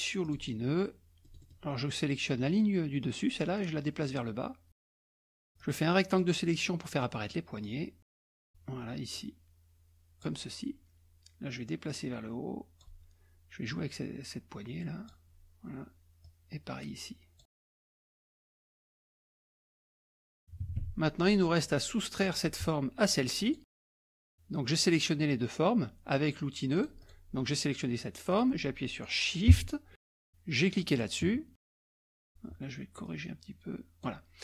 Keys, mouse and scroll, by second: 0.2 click, 1.2 middle click, 1.2-2.0 scroll down 1, 3.0-5.3 drag, 5.6 click, 7.6 click, 9.1-10.6 drag, 11.5-13.2 drag, 13.7-15.5 drag, 16.2-17.6 drag, 17.7 click, 18.4 click, 19.2 click, 20.0-20.3 ctrl+scroll down 2, 20.5 KP_Subtract, 20.6 KP_Subtract, 21.1 KP_Subtract, 21.1 scroll down 1, 21.3 scroll up 1, 21.4 scroll down 1, 21.4-22.0 scroll up 1, 22.2 click, 23.4 shift+click, 26.8 click, 28.3 click, 30.8 shift+click, 32.1 click, 33.1-34.4 drag.